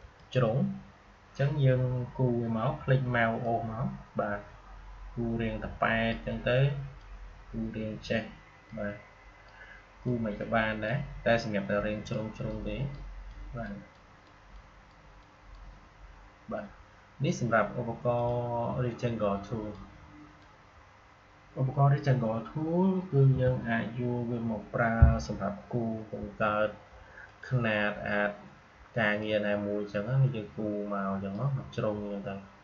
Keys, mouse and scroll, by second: 3.3-18.0 drag, 18.1-23.2 drag, 23.2 Delete, 27.2-32.6 drag.